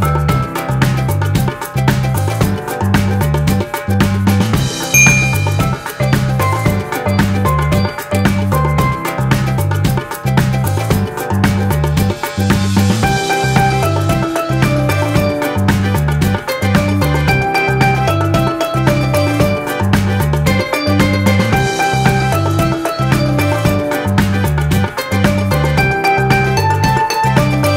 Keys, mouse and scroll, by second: 19.6 ctrl+-.